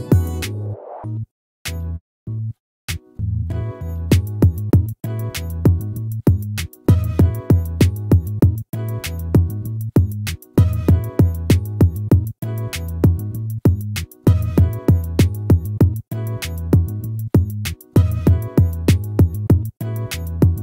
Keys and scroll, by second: 1.7 ctrl++, 9.3 ctrl++, 10.7 ctrl++, 14.8 ctrl+-.